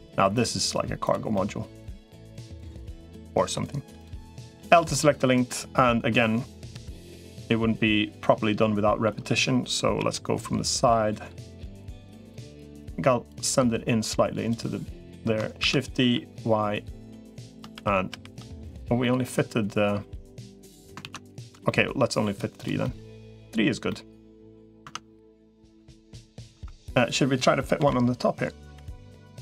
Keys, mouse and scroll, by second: 0.8 click, 1.1 middle click, 2.9 middle click, 4.4 l, 4.7 middle click, 6.6 l, 6.8-8.9 middle drag, 9.8 KP_3, 11.4-12.4 drag, 13.2-14.4 drag, 15.4 shift+d, 17.6 shift+r, 18.0 shift+r, 18.8-20.6 middle drag, 20.8 ctrl+z, 21.2 click, 21.4 middle click, 22.6 middle click, 23.7 middle click, 24.6 Tab, 25.3 middle click, 26.4 Tab, 27.6 l, 28.4 l.